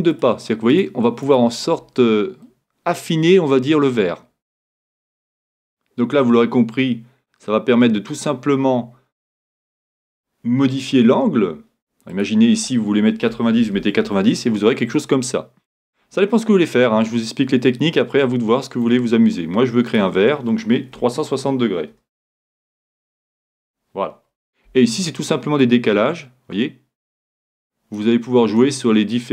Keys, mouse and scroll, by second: 0.3-3.1 drag, 2.4-4.3 middle drag, 5.3-5.9 scroll down 1, 5.9 middle click, 6.5-6.9 scroll down 1, 6.9 scroll up 1, 7.1 scroll down 2, 7.3-8.7 scroll up 2, 8.8-10.2 middle drag, 12.1-14.1 drag, 16.2-17.9 middle drag, 20.0-21.8 drag, 25.6-27.5 drag, 28.6-29.3 drag.